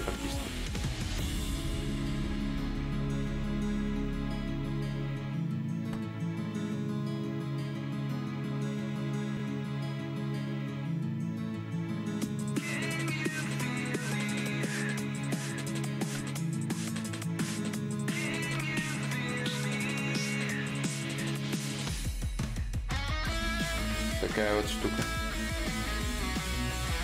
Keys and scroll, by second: 5.3 ctrl+z, 5.3 y, 18.7 x.